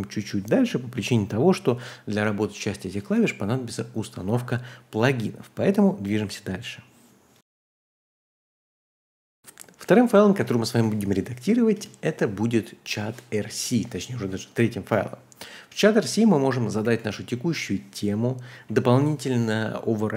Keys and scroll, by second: 9.4 typing, 10.3 ctrl+h, 10.8-11.7 typing, 13.6-14.0 typing, 16.0-17.7 typing.